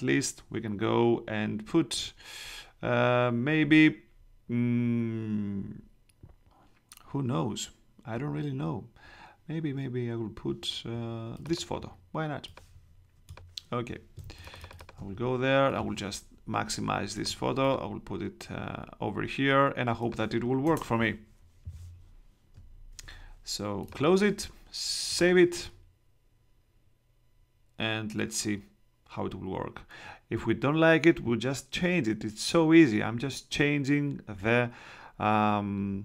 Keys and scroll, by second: 14.1 space, 14.9 super+space, 20.6 Home.